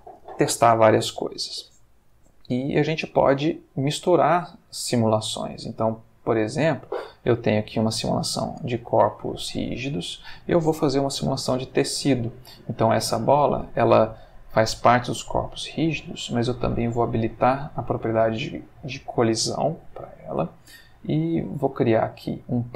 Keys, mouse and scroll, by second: 4.1 space, 8.4 space, 10.9 shift+a, 16.8 click, 19.7 shift+a, 21.8 click.